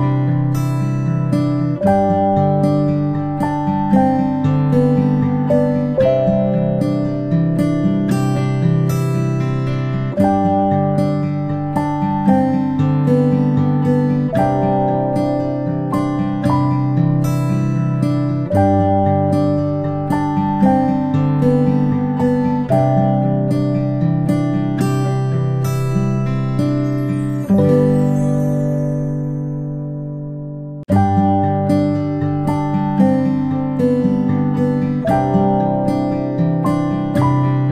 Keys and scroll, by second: 4.9 Delete, 15.5 Delete, 22.3 ctrl+space, 22.5 ctrl+space, 34.2 ctrl+z, 34.4 ctrl+c, 34.7 ctrl+v, 35.9 ctrl+shift+[, 36.2 ctrl+shift+], 36.9 ctrl+[, 36.9 ctrl+], 36.9 ctrl+z.